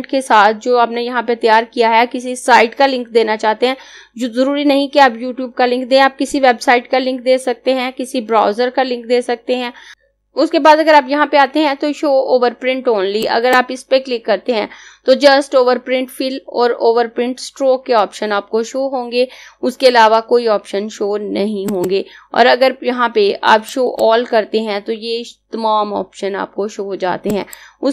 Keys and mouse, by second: 10.9 click, 13.2 click, 21.5 click, 27.0 click.